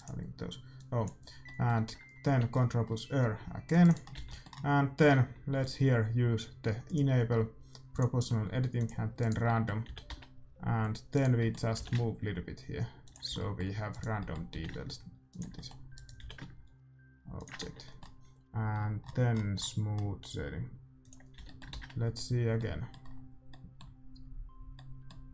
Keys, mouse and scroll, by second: 0.7-2.7 drag, 1.4-3.6 middle drag, 2.2 ctrl+r, 4.1-7.1 middle drag, 4.1 a, 5.5-7.6 drag, 7.9-9.8 drag, 9.1-10.9 right drag, 9.4-11.1 middle drag, 9.8 g, 11.3-12.5 middle drag, 11.7 g, 13.2 a, 13.8-15.5 middle drag, 13.8-17.7 right drag, 14.5 g, 15.9-17.1 middle drag, 16.1 g, 17.6 Tab, 21.1-22.8 drag, 21.3 a, 21.4-22.8 right drag, 21.8 shift+z.